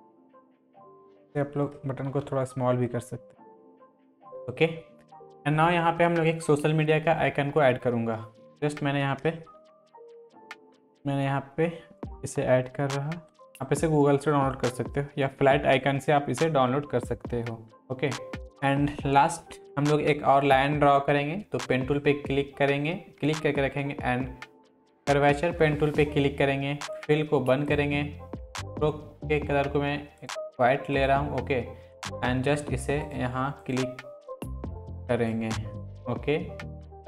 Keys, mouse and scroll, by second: 0.3 Down, 0.5 ctrl+t, 0.6 alt+drag, 2.1 ctrl+t, 2.8-3.8 click, 3.8 Down, 4.4 click, 8.5 click, 9.6 ctrl+v, 10.4-12.0 drag, 12.5 Right, 13.4 Left, 13.5 click, 15.0 Left, 18.4 click, 21.7 click.